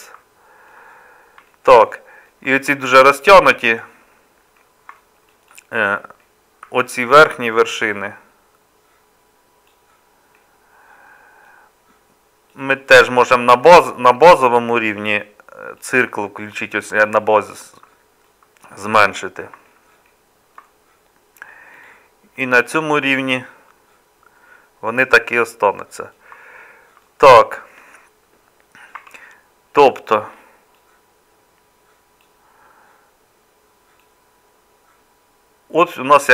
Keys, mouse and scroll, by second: 29.0 Tab.